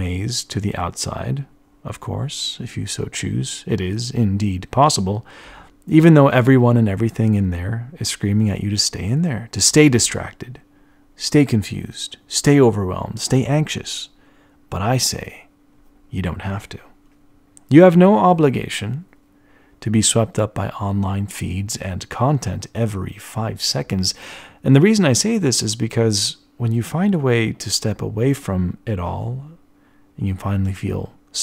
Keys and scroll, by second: 18.5 ctrl+alt+1, 18.9 ctrl+alt+1, 18.9 b.